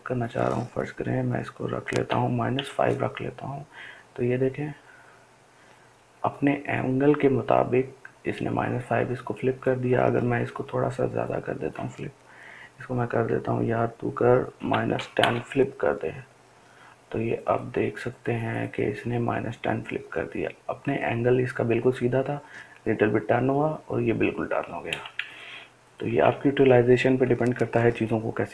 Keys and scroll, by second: 3.3-4.3 typing, 15.6-16.9 typing.